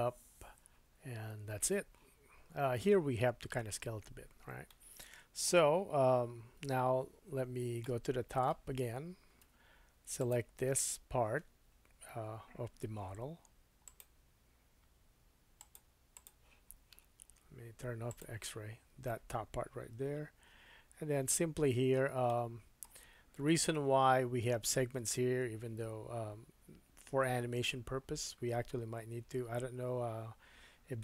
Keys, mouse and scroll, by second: 4.7 shift+middle click, 6.5 2, 7.8 middle click, 9.5 3, 10.2 click, 13.9 click, 14.8-18.6 drag, 15.6 middle click, 15.6 right click, 18.1 middle click, 18.1 right click, 20.0 KP_1, 22.2 shift+middle click.